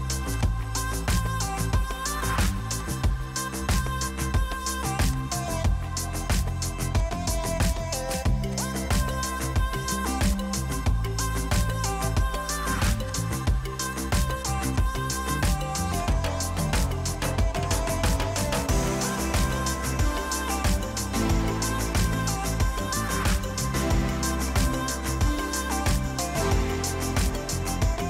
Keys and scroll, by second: 3.2 m, 5.6 p, 9.2 m, 13.7 p, 22.9 l, 24.7 p, 26.1 Escape.